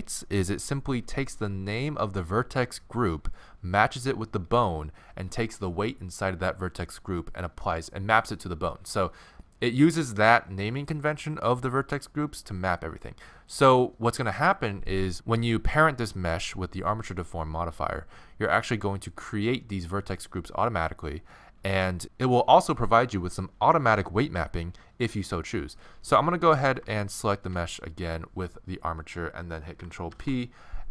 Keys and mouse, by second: 27.1-28.9 right drag, 30.1 ctrl+p.